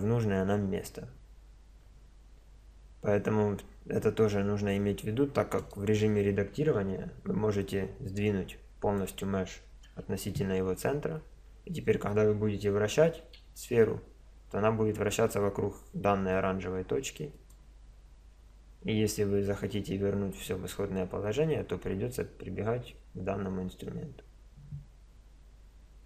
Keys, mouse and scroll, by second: 5.6-7.1 drag, 6.8 Tab, 7.1 right click, 7.3 right click, 7.4 middle click, 7.7-9.4 drag, 9.9 Tab, 13.2 r.